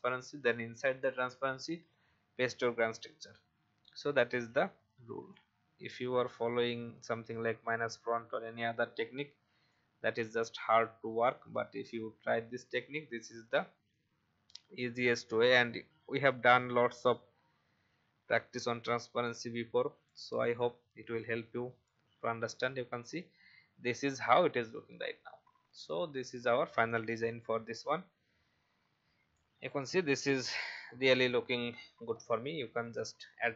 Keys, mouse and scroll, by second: 1.1 ctrl+v, 5.3-7.3 shift+drag, 9.6-19.8 drag, 25.6-25.9 alt+scroll up 1, 27.0 click, 30.5 typing.